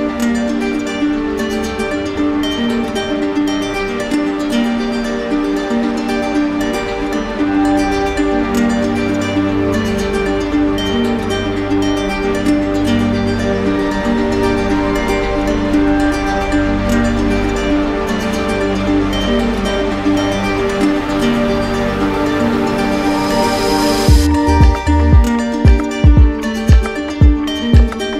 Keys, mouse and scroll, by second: 0.3 click, 6.9 click, 10.0 alt+click, 10.1 alt+right click, 11.5 alt+right click, 12.0 alt+right click, 14.5 right click, 15.0 shift+right click, 15.7 alt+right click, 20.1 alt+right click, 20.8 shift+click, 23.0-25.2 drag, 25.7-26.8 drag, 27.9 0.